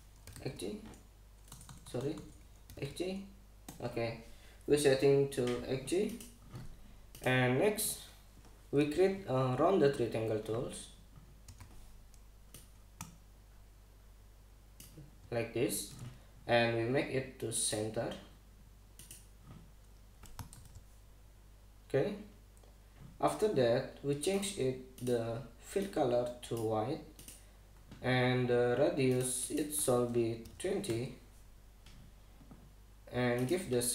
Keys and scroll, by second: 0.0-3.9 typing, 4.3 Return, 12.1 u, 21.2 super+=, 31.1 2, 31.5 Return.